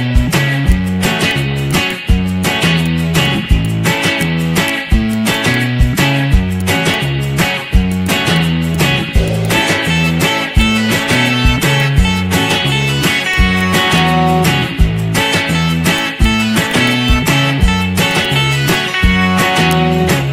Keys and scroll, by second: 6.8 z, 14.3 z, 15.1 z, 18.5 Delete.